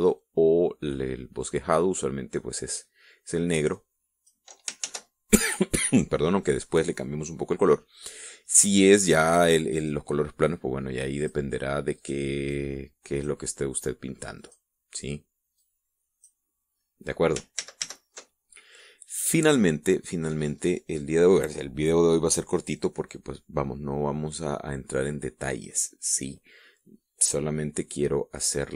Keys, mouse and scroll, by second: 4.1 click, 5.3 ctrl+z, 10.2 click, 11.7 click, 12.4 click, 12.9 click, 14.8 click, 16.0 click, 18.0 ctrl+z.